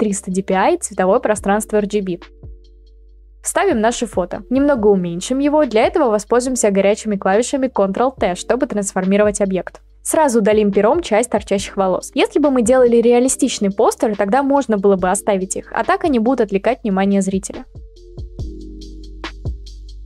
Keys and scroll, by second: 0.0-0.7 typing, 4.3 ctrl+v, 4.8 ctrl+t, 9.0 Return, 10.0 Up, 18.7 ctrl+z, 19.1-20.0 ctrl+z.